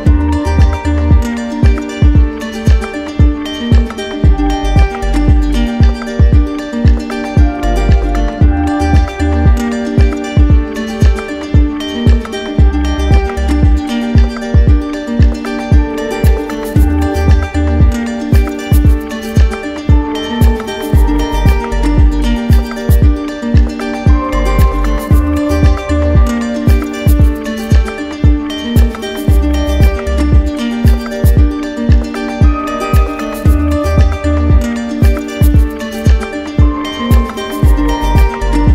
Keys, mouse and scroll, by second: 1.4 click, 2.2 click, 3.2 alt+click, 4.2 alt+click, 6.3 alt+click, 6.7 shift+click, 7.6 alt+click, 23.9 alt+click, 24.5 ctrl+click, 25.0 ctrl+click, 25.7 w, 29.1 click, 30.0 ctrl+click, 30.8 ctrl+click, 31.2 ctrl+click, 34.7 click, 35.5 click, 36.1 alt+click, 36.6 alt+click.